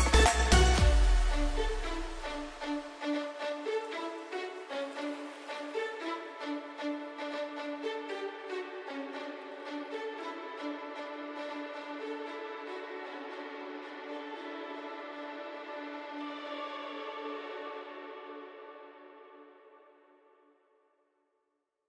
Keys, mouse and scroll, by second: 4.0 v, 4.4 click, 6.4 t, 6.9 click, 11.8 click.